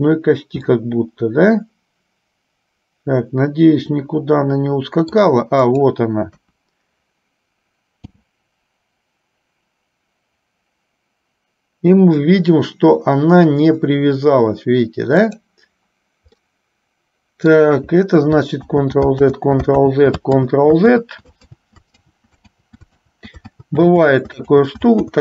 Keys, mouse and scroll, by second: 1.0-5.5 middle drag, 5.8 click, 6.6 KP_1, 8.2 g, 16.6-17.8 middle drag, 19.0 ctrl+z, 20.2 ctrl+z, 21.3 ctrl+z, 23.3 ctrl+z, 24.0 ctrl+z, 24.5 ctrl+z, 24.8 ctrl+z.